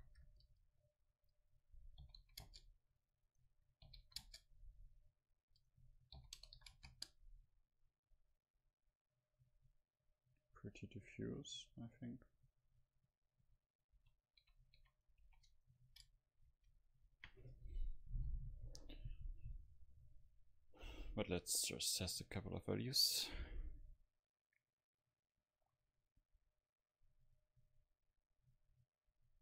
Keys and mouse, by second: 9.2-11.3 drag, 14.1 a, 15.1 a, 15.5 ctrl+s, 16.6 F12.